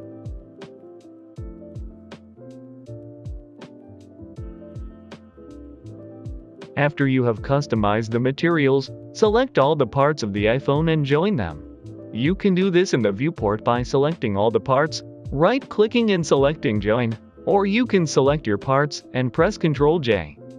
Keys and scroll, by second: 3.4 ctrl+c, 3.4 Escape, 4.4 ctrl+v, 4.5 Return, 5.5 ctrl+s, 17.9 Escape, 19.2 ctrl+j.